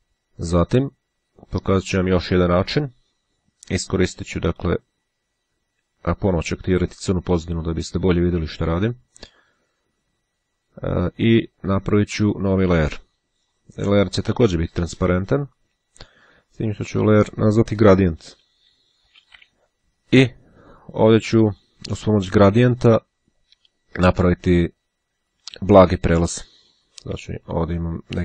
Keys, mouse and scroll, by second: 0.8-2.1 drag, 2.2 click, 4.7 click, 6.0-7.5 drag, 11.0-12.4 drag, 13.6 click, 17.2 click, 17.7-18.8 typing, 27.2 click.